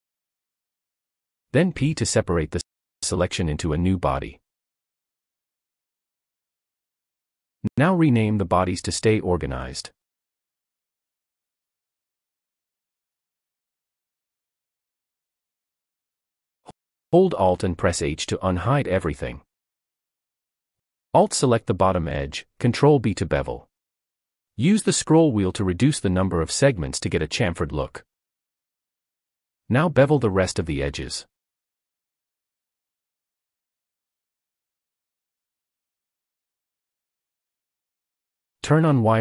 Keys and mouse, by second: 3.7 p, 8.2 click, 8.5-11.1 drag, 11.7 click, 11.9 click, 13.1 s, 19.6 alt+h, 22.2 alt+click, 23.9 ctrl+b, 30.1 shift+click, 31.3 ctrl+b, 33.6 ctrl+b, 35.0 ctrl+b, 35.4 shift+middle click, 36.3 ctrl+b.